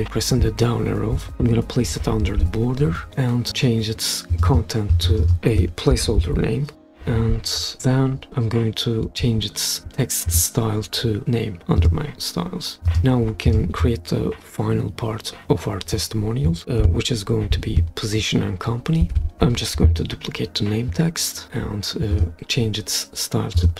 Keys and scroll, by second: 1.1 Down, 5.9-7.2 typing, 19.0 super+d.